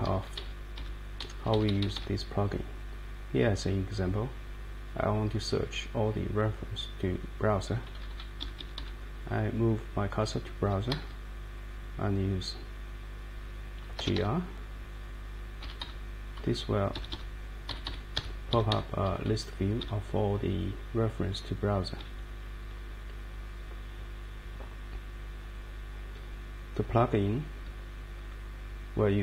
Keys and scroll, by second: 0.0 Down, 0.3 Down, 0.7 Up, 1.2 Right, 1.4 Right, 1.5 Right, 1.7 Right, 1.8 Right, 1.9 Right, 7.7 Down, 7.9 Down, 8.1 Down, 8.4 Up, 8.6 Up, 8.8 Up, 10.5 Right, 10.8 Right, 11.0 Right, 13.7-14.6 typing, 15.6 Down, 16.3 Down, 16.9 Up, 17.7 Down, 18.1 Up, 18.7 Up, 19.0 Down, 19.8 Up, 21.0 Down, 22.0 Up, 22.6 Up.